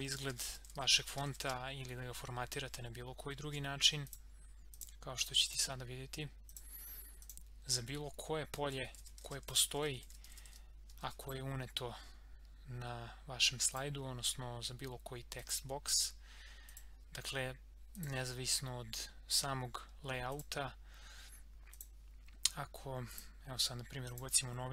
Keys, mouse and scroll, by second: 0.0-1.9 typing, 3.4 ctrl+a, 4.0 click, 8.4-11.0 typing, 11.2 click, 13.7 click, 22.5 click.